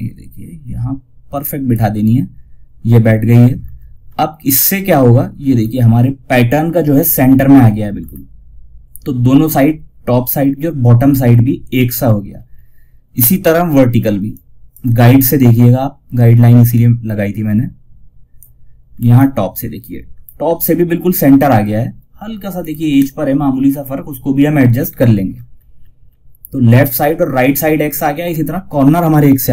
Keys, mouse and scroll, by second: 2.9 scroll down 1, 5.0 scroll up 1, 7.3 scroll up 1, 8.9-9.4 scroll down 1, 11.7 scroll down 1, 13.6-18.2 drag, 18.2 scroll up 1, 21.9-22.2 scroll up 1, 24.6 scroll down 1, 27.5 scroll down 1.